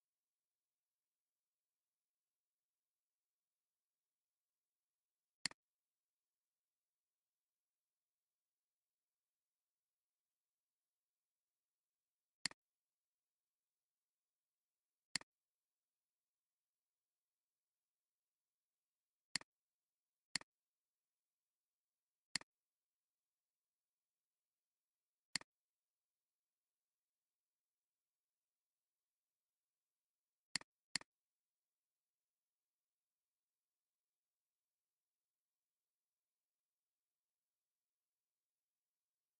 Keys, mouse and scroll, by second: 11.1 click, 12.5-13.7 drag, 19.2 space, 19.8 alt+scroll, 19.9 alt+scroll down 2, 20.3 space, 22.1 space, 25.3 alt+click, 29.4 alt+scroll up 1, 30.8 double click.